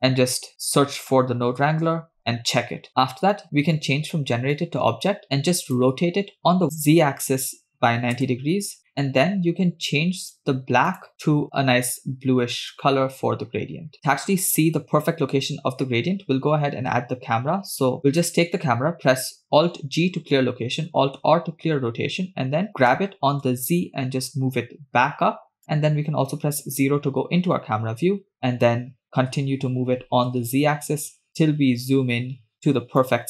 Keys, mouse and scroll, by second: 2.9 middle click, 2.9 scroll up 3, 4.6 click, 4.9-5.2 drag, 5.7 click, 6.7-8.8 drag, 8.9 middle click, 10.2 click, 10.9 click, 13.9 shift+middle click, 18.2 click, 19.9 alt+g, 21.3 alt+r, 23.1 g, 26.8 KP_0, 28.2 scroll up 2, 28.3-28.7 scroll down 4, 28.7-29.0 scroll up 1, 29.1 g.